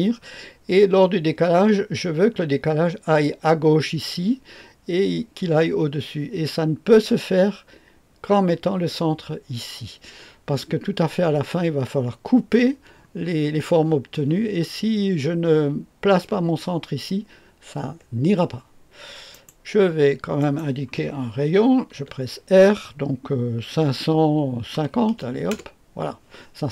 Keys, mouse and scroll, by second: 19.3 right click, 20.4 click, 21.9 r, 23.7-25.7 typing, 25.5 Return.